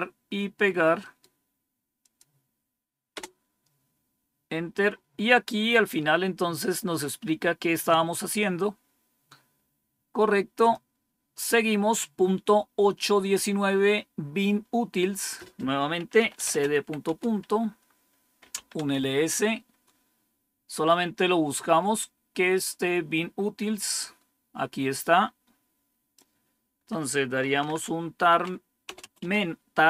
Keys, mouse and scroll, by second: 0.9 right click, 1.9 click, 3.1 Return, 5.7 scroll down 3, 7.5 scroll down 1, 10.5 click, 15.1-16.1 drag, 15.9-19.0 typing, 20.8-22.3 scroll up 1, 22.8 scroll up 1, 24.8-26.1 drag, 27.1-28.1 typing, 29.1 typing.